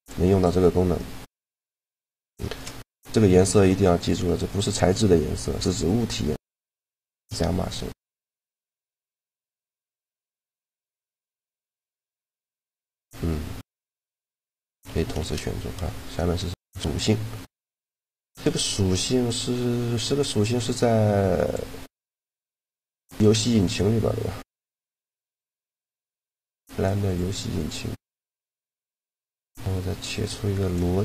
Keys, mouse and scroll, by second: 2.0 shift+g, 6.8 shift+g, 9.1-13.1 right drag, 12.1 shift+g, 13.5 g, 14.9 shift+g, 21.2-24.6 drag, 29.9-31.0 drag.